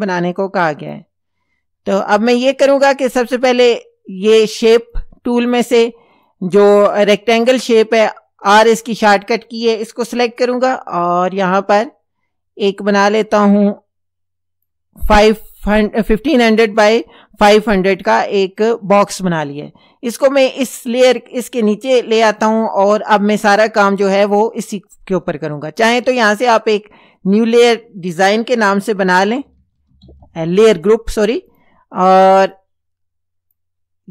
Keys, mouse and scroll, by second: 0.8 click, 4.8 click, 6.2 click, 7.4 click, 10.3 r, 11.8-14.9 drag, 20.2-21.3 drag, 26.4 click, 27.5 click, 28.9-30.7 typing, 31.5 click, 32.6-33.7 drag.